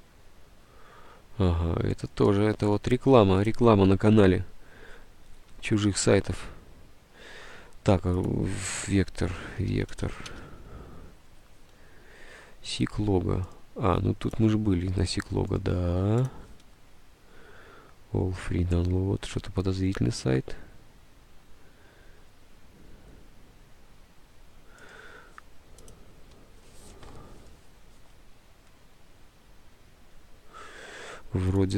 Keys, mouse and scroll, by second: 8.8-10.7 typing.